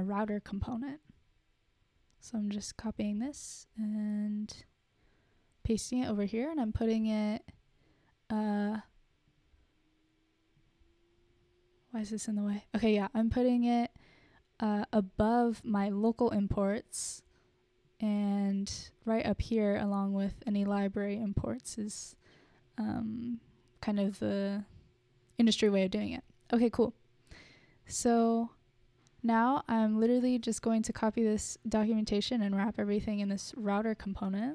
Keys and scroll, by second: 3.5 super+c, 3.7 super+c, 3.9 super+c, 7.2 Return, 7.4 super+v, 9.3 Return.